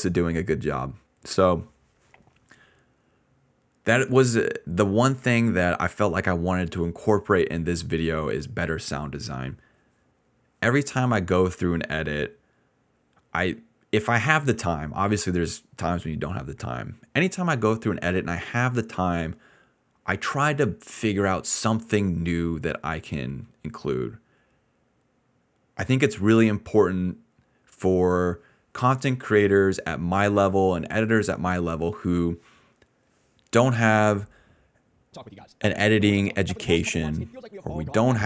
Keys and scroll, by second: 13.1-13.9 typing, 35.0 space, 35.4 d, 36.5 d, 37.6-38.2 typing.